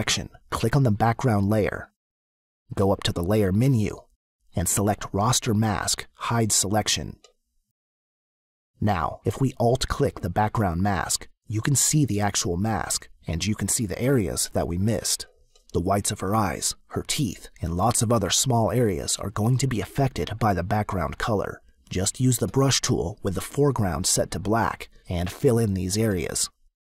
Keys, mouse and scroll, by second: 1.7 click, 2.3 click, 4.6 click, 7.7 click, 10.5 alt+click, 15.4 x, 17.7 click, 20.8 click, 21.7 click, 23.9 click, 25.3 click.